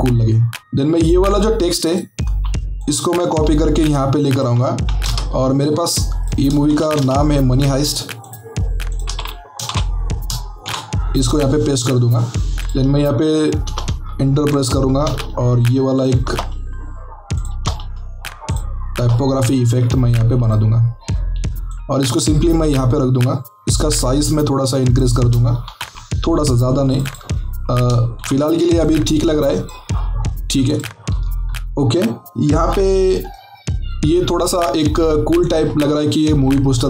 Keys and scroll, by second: 5.1 alt+shift+Tab, 6.6 typing, 7.0 ctrl+alt+Tab, 9.6-10.6 typing, 13.7 Return, 16.1 BackSpace, 17.5 Return, 25.6 ctrl+t, 28.1 ctrl+t.